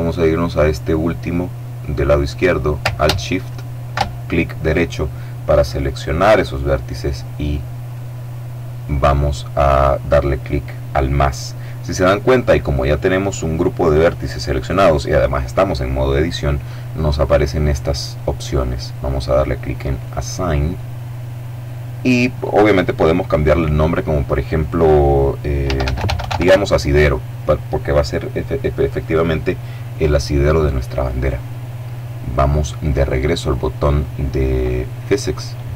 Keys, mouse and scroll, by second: 3.1 alt+shift+right click, 7.5 click, 19.7 click, 22.0 click, 25.1-26.6 typing.